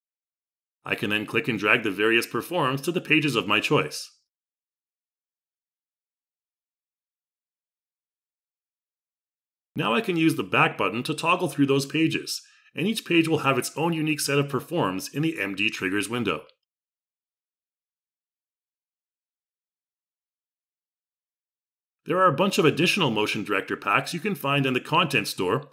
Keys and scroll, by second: 14.1 x.